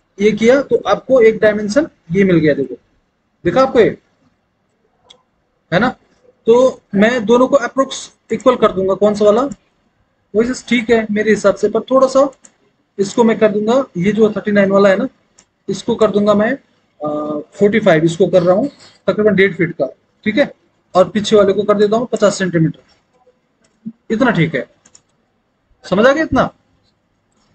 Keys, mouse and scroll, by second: 3.1 alt+w, 18.2 KP_4, 18.4 KP_5, 18.9 Return, 22.9 KP_5, 23.2 KP_0, 23.6 Return.